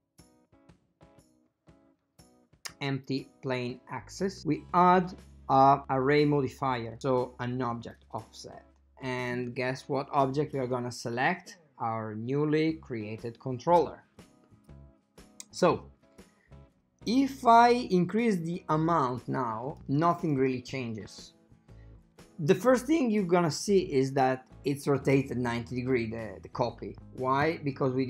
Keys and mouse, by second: 0.7 click, 7.9 click, 10.7 click, 17.3 click, 18.5 click, 18.9 click, 19.4 click, 19.7 click, 20.4 click.